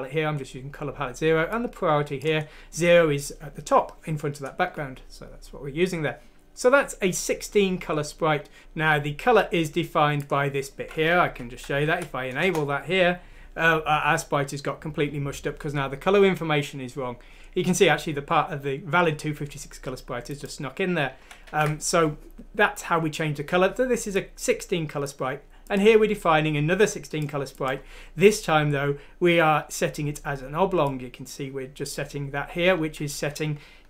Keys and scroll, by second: 11.2 1, 11.9 F6, 12.4 Return, 21.2 ctrl+z, 21.5 ctrl+z.